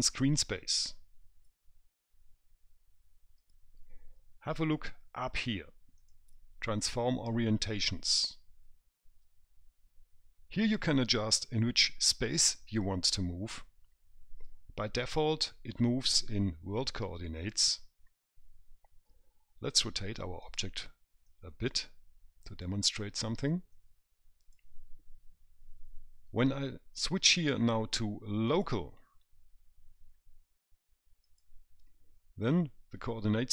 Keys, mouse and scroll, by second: 6.3 click, 20.7 click, 21.6 click, 24.0 click, 27.3 click, 31.5 click.